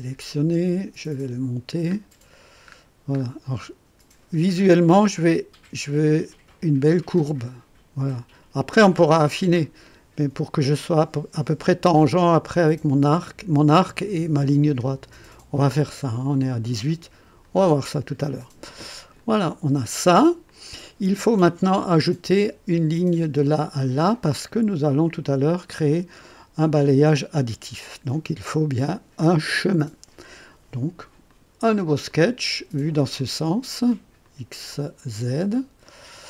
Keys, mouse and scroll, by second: 1.8 scroll up 2, 2.6-2.9 scroll up 2, 3.1-3.9 scroll up 4, 17.4 click, 19.1 click, 20.1 click, 31.2 click, 32.0 click, 33.1 click, 34.2 click, 35.8 click.